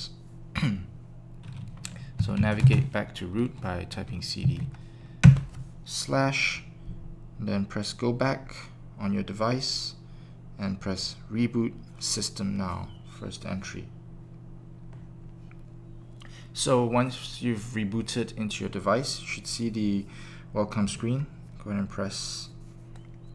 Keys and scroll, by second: 1.9-2.8 typing, 5.0 typing, 5.2 Return.